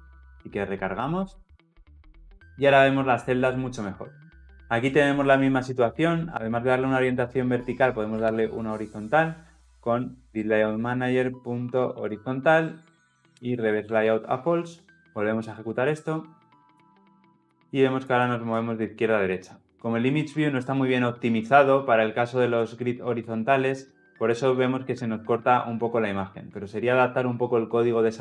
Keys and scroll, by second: 0.1 ctrl+F10, 5.5 ctrl+p, 10.6 Return, 16.7 ctrl+F10.